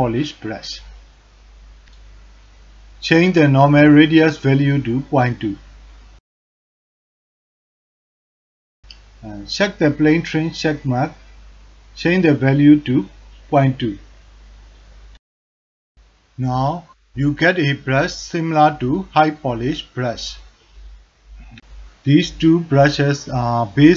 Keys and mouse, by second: 0.4 click, 5.0-8.8 drag, 12.0-13.7 drag, 16.5-19.5 drag, 20.5 click.